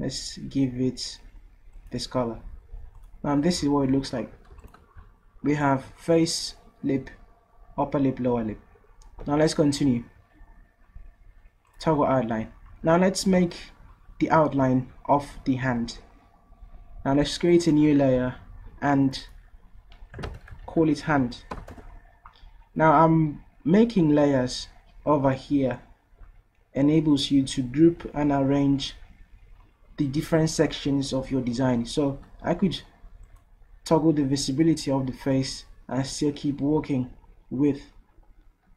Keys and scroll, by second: 4.6 v, 20.0-21.8 typing.